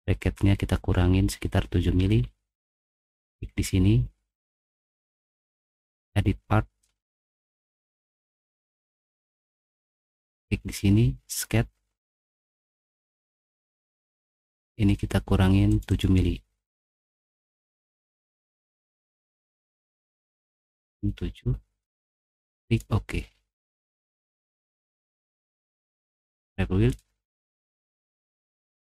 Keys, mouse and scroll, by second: 2.0 Escape, 2.6 click, 5.3 click, 7.2 click, 10.3 click, 11.3 click, 12.5 middle click, 12.9 middle click, 13.4 middle click, 13.8 middle click, 16.5 click, 18.6 click, 22.6 click.